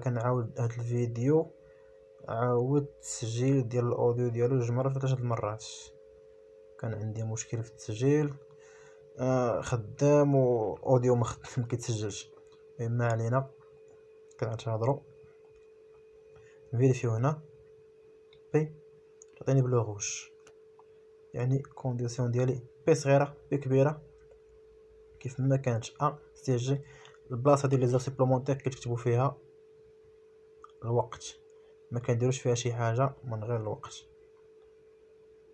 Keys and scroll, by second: 25.4 Escape, 25.6 space, 26.4 ctrl+s, 30.1 p, 30.8 Return, 33.0 Delete, 34.8 Escape.